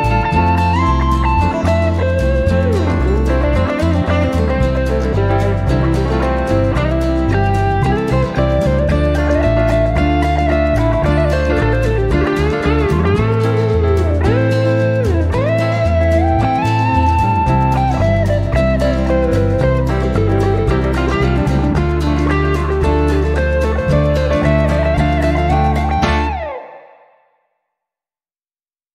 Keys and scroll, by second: 8.4 7, 9.6 0.